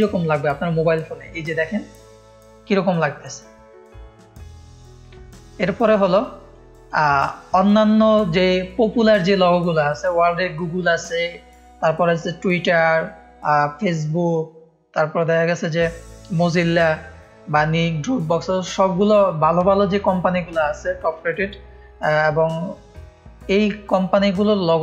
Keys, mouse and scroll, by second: 0.0 scroll down 1, 4.9-5.7 scroll down 1, 6.6 click, 7.2 click, 7.6-8.0 scroll down 1, 9.0-9.4 scroll up 1, 23.1-23.5 scroll down 2.